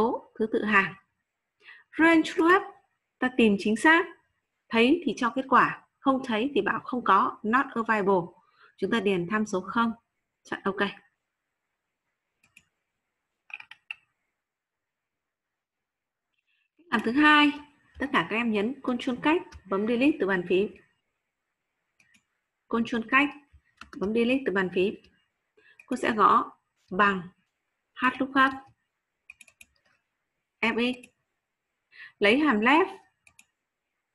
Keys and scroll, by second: 19.0 ctrl+space, 23.8 ctrl+space, 24.8 Delete.